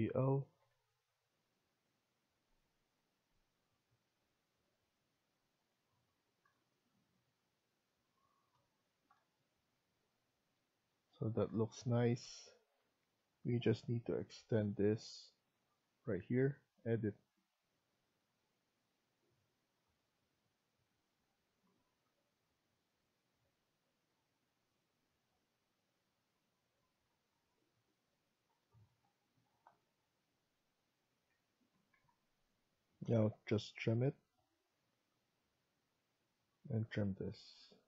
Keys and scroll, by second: 8.7 Escape, 31.2 Escape, 31.6 Escape, 32.9 typing, 36.9 typing.